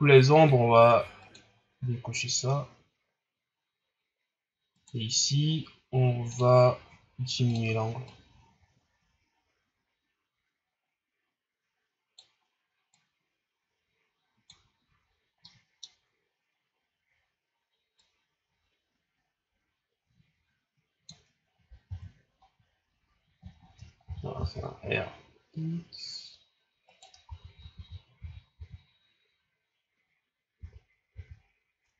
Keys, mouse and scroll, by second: 1.2 click, 4.7 right click, 6.4-7.5 drag, 8.0-11.2 drag, 12.9-15.4 drag, 15.4-16.2 middle drag, 16.2-17.5 scroll down 2, 17.9-21.0 drag, 21.8 KP_0, 22.7 scroll up 1, 23.6 shift+scroll up 3, 24.0 r, 27.2 ctrl+z, 27.5 ctrl+z, 27.7 ctrl+z, 28.2 ctrl+z, 28.5 ctrl+z, 30.5 ctrl+z, 31.1 ctrl+z.